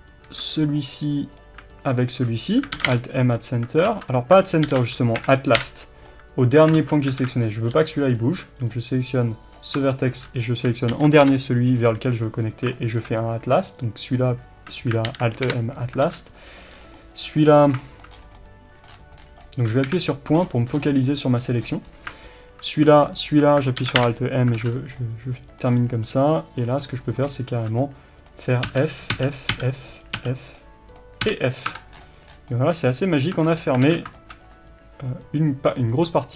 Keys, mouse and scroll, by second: 0.6-1.3 middle drag, 1.3 click, 3.0 alt+m, 4.0 ctrl+z, 5.7 Return, 6.8 ctrl+z, 7.3 alt+a, 7.4 click, 7.8 g, 8.2 right click, 9.5 click, 11.3 alt+m, 11.4 Return, 12.4 click, 12.8-14.3 shift+middle drag, 14.3 shift+click, 15.6 Return, 16.1 alt+a, 16.6 click, 16.8 scroll down 1, 17.0-23.2 middle drag, 17.7 scroll down 1, 18.2 scroll up 1, 19.0 scroll down 1, 19.9 KP_Decimal, 20.5-20.8 scroll down 1, 21.7-23.2 scroll up 2, 23.2 shift+click, 24.1 alt+m, 24.6 alt+a, 24.7 scroll down 2, 25.0-27.1 middle drag, 27.1 click, 27.9-36.3 middle drag, 28.8 f, 30.0 scroll down 2, 30.3 f, 31.3 f, 31.7 Tab, 32.0-32.4 scroll down 1, 33.4 Tab, 33.9 alt+a.